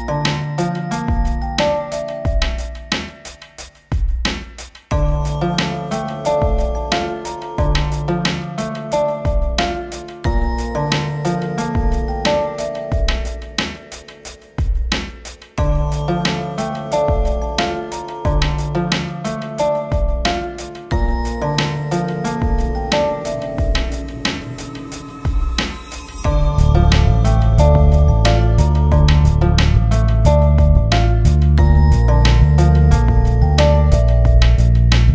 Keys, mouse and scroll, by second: 0.7 F4, 1.7-2.9 drag, 2.9 F4, 4.0 click, 4.9 shift+F2, 6.1 click, 7.2-9.8 drag, 9.8-12.7 drag, 13.0 F4, 14.5 click, 17.5 click, 18.9 click, 19.3 scroll down 1, 19.6 click, 19.7 ctrl+space, 19.9 click, 20.2 click, 20.3 ctrl+space, 20.5 click, 20.9 ctrl+space, 21.0 click, 21.2 ctrl+z, 21.4 ctrl+space, 21.5 scroll up 1, 22.1 click, 22.3 ctrl+z, 22.4 click, 22.9 ctrl+space, 22.9 click, 23.4 scroll down 1, 23.5 scroll up 1, 23.7 ctrl+z, 24.0 ctrl+click, 24.2 right click, 24.3 scroll up 1, 24.5 click, 24.7-25.1 scroll down 1, 25.1 scroll up 1, 25.2 click, 25.4 space, 25.5 click, 25.6 scroll down 1, 25.8 click, 26.3 ctrl+z, 26.5 click, 27.1 space, 27.1 click, 27.5 click, 27.8 F4, 27.9 ctrl+s, 28.2 scroll down 1, 28.5 click, 28.8 c, 28.9 ctrl+click, 29.1 scroll down 1, 29.1 F4, 30.5 scroll down 1, 30.6 F4, 30.7 click, 32.6 click, 33.5 F3, 33.6 ctrl+z, 33.8 click, 34.1 scroll up 1, 34.3 right click, 34.6 shift+F2, 34.6 right click, 34.7 click, 34.8 F10, 34.9 click.